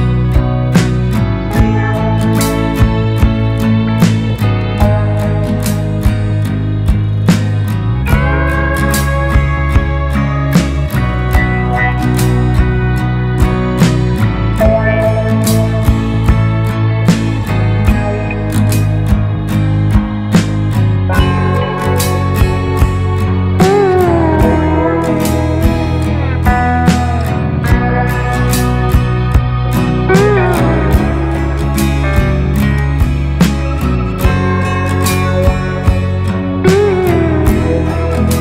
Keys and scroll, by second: 17.7 Delete, 18.3 ctrl+space, 38.1 Delete.